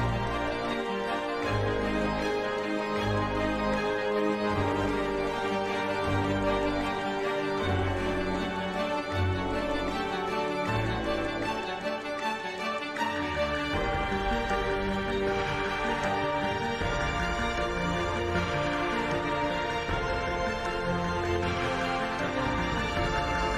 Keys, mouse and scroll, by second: 1.9 KP_1, 3.4 e, 6.9 KP_1, 7.1 KP_3, 7.8 e, 12.5 click, 13.1 KP_5, 13.7 ctrl+b, 16.2 middle click, 16.4 Tab, 16.7 ctrl+2, 17.6 Tab, 18.1 ctrl+z, 18.3 ctrl+z, 18.6 Tab, 19.1 ctrl+z, 19.5 Tab, 20.3 n, 21.0 click, 21.5 click, 22.4 click, 22.8 Tab.